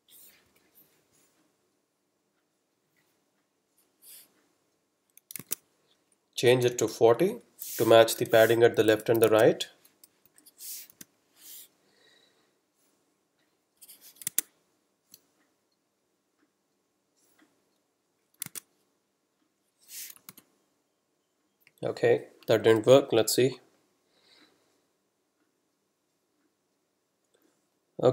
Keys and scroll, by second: 0.5 super+F12, 5.5 super+Tab, 6.7 super+Right, 6.9 super+Left, 8.0 BackSpace, 8.2 4, 9.3 super+Tab, 10.3 super+F12, 14.4 super+Tab, 18.6 super+Tab, 20.3 super+r, 22.7 F12.